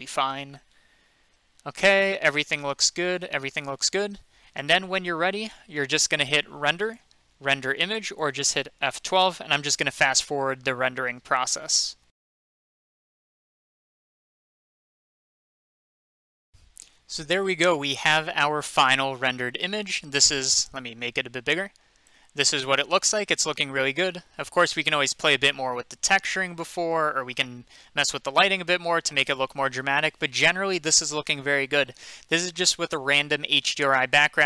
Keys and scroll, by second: 11.9 F12.